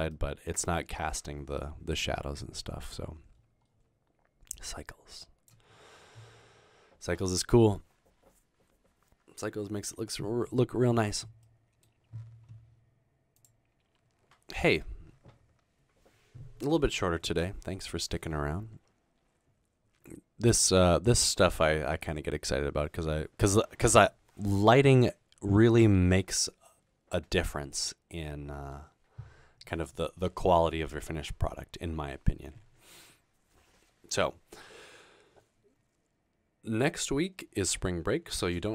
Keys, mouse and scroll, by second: 0.2 middle drag, 3.4-4.6 middle drag, 3.4-4.6 scroll up 2, 4.6 click, 11.5-12.1 scroll up 2, 12.1 scroll down 2.